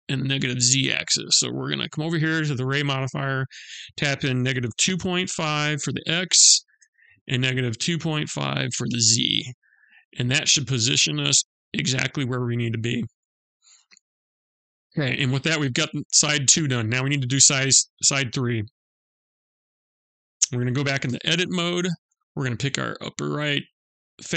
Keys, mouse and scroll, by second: 2.3 click, 9.8-10.1 scroll down 1, 10.1 middle click, 14.6 middle click, 16.4 middle click, 19.4 click, 20.5 Tab, 22.2 click, 24.2 shift+s.